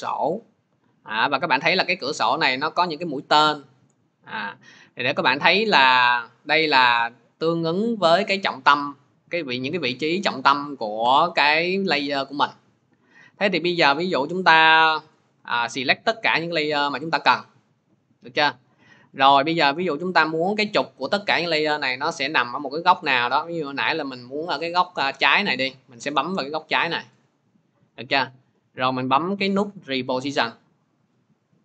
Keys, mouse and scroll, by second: 0.2 click, 14.2 click, 16.7 shift+click, 24.8 click, 29.8 click, 30.5-31.6 drag.